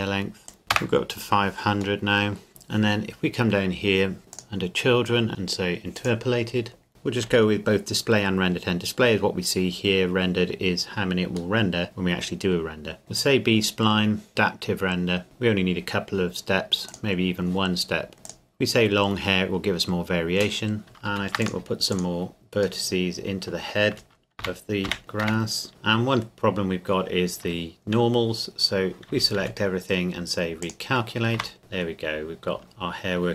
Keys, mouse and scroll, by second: 0.5 click, 0.6 KP_0, 0.7 KP_Enter, 2.0 middle click, 2.5-4.2 scroll down 1, 4.3 click, 6.9 KP_Enter, 11.6 middle click, 12.6-13.0 scroll up 1, 13.0 click, 18.2 click, 20.8 Tab, 21.1 ctrl+r, 21.4 click, 22.8 middle click, 24.4 ctrl+KP_Add, 25.7 Tab, 27.4 Tab, 29.1 a, 29.4 a, 30.6 click, 31.4 Tab, 31.6-32.4 scroll down 1, 32.4-33.3 scroll up 1.